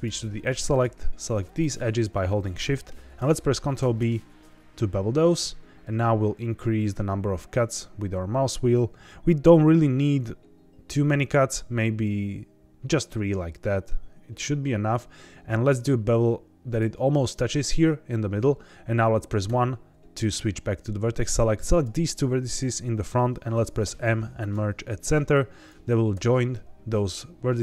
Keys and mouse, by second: 0.6 click, 1.4 shift+click, 3.7 ctrl+b, 16.6 click, 19.4 1, 21.1 click, 22.6 shift+middle click, 23.8 m, 25.3 click, 26.1 m.